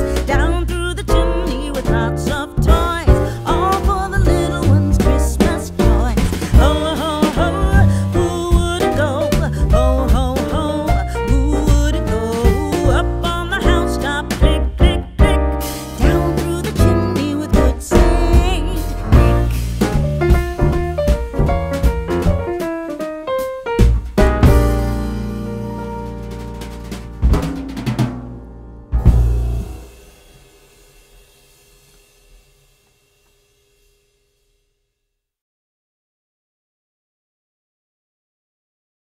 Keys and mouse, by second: 0.5 Tab, 1.7 Delete, 3.4-4.6 drag, 6.6 shift+a, 10.9-12.3 middle drag, 12.6 click, 15.7 KP_7, 18.1-19.4 drag, 21.4 middle click, 23.5 KP_0, 26.4 KP_1, 27.1-28.3 middle drag, 28.9-30.1 drag, 32.0-33.0 drag, 35.1-36.3 middle drag, 38.4 ctrl+a, 38.7 ctrl+a.